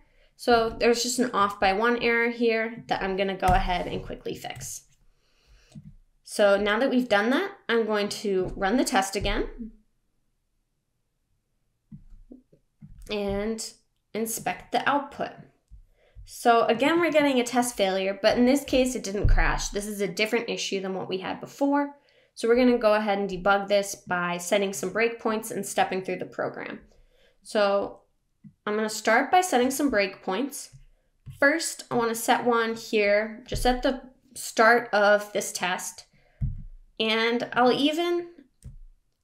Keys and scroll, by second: 4.3 super+s.